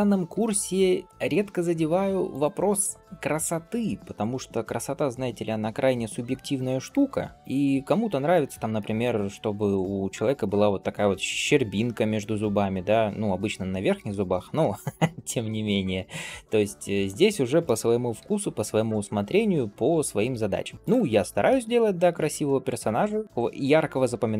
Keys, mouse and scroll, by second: 0.2 g, 2.5-2.8 scroll down 2, 2.8 shift+middle click, 3.2-3.6 scroll up 1, 3.6 click, 4.4 middle click, 5.0 g, 7.3 shift+middle click, 7.3 scroll down 2, 7.9 scroll down 1, 8.3 shift+middle click, 8.6 middle click, 9.2-9.6 scroll up 2, 9.6 click, 10.3 middle click, 11.0 g, 12.8-13.3 scroll down 1, 13.6 scroll up 1, 13.9 shift+middle click, 14.4 middle click, 15.5 shift+middle click, 16.2-16.8 scroll up 1, 16.8 click, 17.5 middle click, 18.0 g, 19.6 click, 20.1 g, 21.0 scroll down 1, 21.3 shift+middle click, 21.6 middle click, 22.1 shift+middle click, 22.5 scroll up 2, 22.8 middle click, 23.9 click.